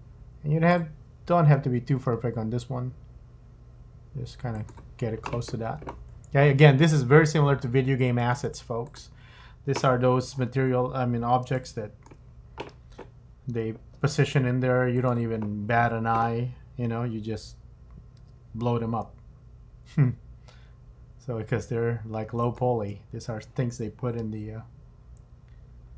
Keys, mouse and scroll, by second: 1.4 click, 1.9 g, 6.1-6.4 scroll down 2, 7.6 middle click, 8.8 click, 9.9-10.3 scroll up 4, 10.3-10.7 scroll down 8, 11.0-11.5 scroll up 1, 11.6 shift+middle click, 13.8 g, 18.2 r, 24.2 g.